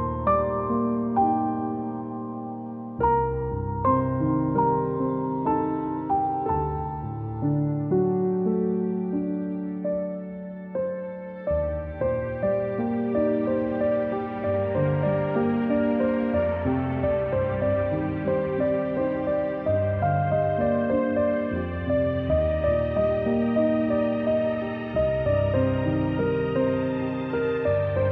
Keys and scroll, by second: 4.3 shift+Down, 4.6 shift+Down, 4.8 shift+Down, 4.9 shift+Down, 5.1 shift+Down, 5.2 shift+Down, 7.5 ctrl+z, 14.5 ctrl+z, 24.8-25.6 typing, 26.9-28.1 typing.